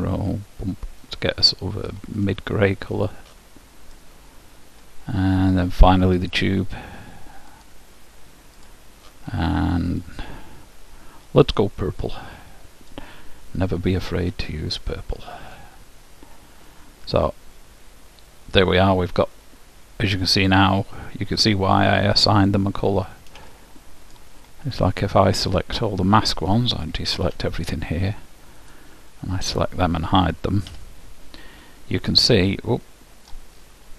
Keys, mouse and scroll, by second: 3.2-5.2 drag, 5.7-7.7 middle drag, 6.5-9.5 drag, 10.1-11.9 drag, 14.1-16.1 drag, 16.8-18.8 middle drag, 22.9-27.1 middle drag, 27.3 a, 28.7-31.6 drag, 30.9 h, 31.6-32.7 middle drag.